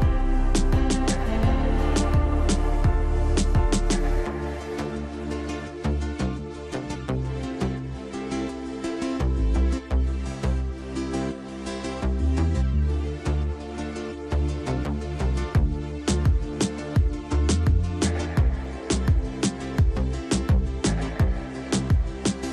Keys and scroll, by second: 2.1 t, 2.5 Escape, 5.8 space, 12.7 Escape, 13.2 shift+Page_Up, 13.8 Escape.